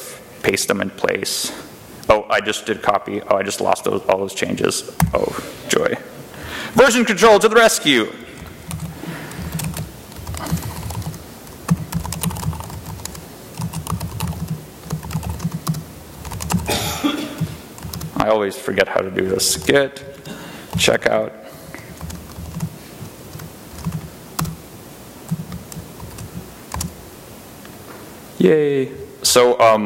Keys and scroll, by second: 4.8 u, 7.0 F1, 7.8-17.6 typing, 17.8 Return, 18.8-23.5 typing, 22.4 Tab, 23.7 Tab, 24.2 Return, 25.1 F1, 25.8 ctrl+r, 26.6 space.